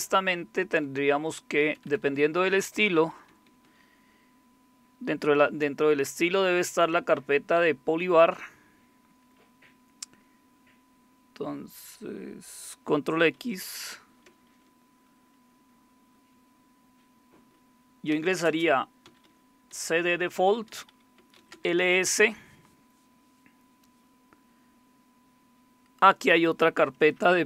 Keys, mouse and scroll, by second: 1.6-3.6 typing, 1.9 Left, 2.0 Left, 6.2 Right, 6.2 typing, 6.6 Right, 6.8-7.6 Right, 7.6 Down, 8.2 Down, 8.4 Down, 8.6-9.2 Down, 13.3 ctrl+x, 17.9-22.1 typing, 27.2-27.4 typing.